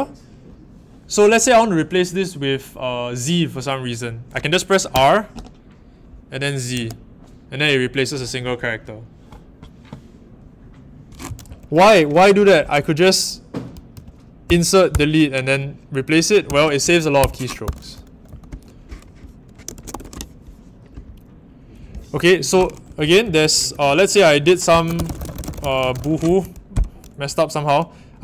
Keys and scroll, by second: 4.9 r, 6.7 shift+z, 11.4 typing, 13.9-14.9 typing, 16.4 c, 17.1 Escape, 17.6-18.2 typing, 19.4-20.3 typing, 22.6-26.2 typing.